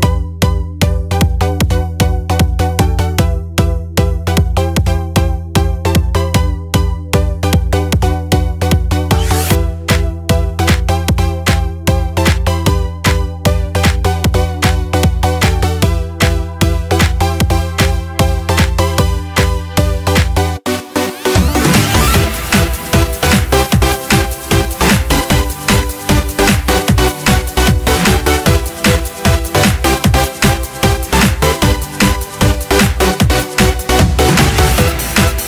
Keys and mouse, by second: 4.9-11.4 drag, 9.6 KP_0, 13.2-16.1 drag, 14.7 KP_0, 14.9 KP_0, 18.9-21.2 drag, 30.7 click, 32.3 n, 35.0 click.